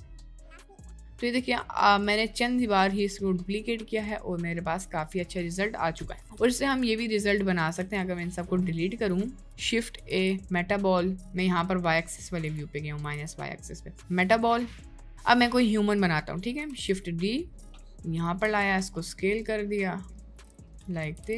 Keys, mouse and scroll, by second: 6.2 Delete, 6.8 Delete, 7.8 Delete, 10.1 shift+a, 13.2 shift+a, 16.7 shift+d.